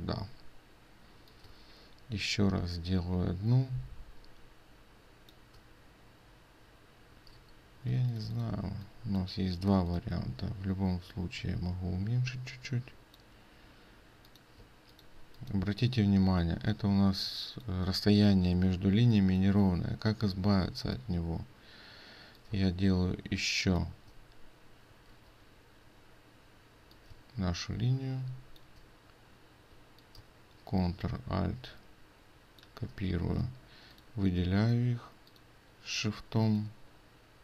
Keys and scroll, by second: 7.4 ctrl+z, 8.1 ctrl+space, 14.6 ctrl+space, 25.2 ctrl+z.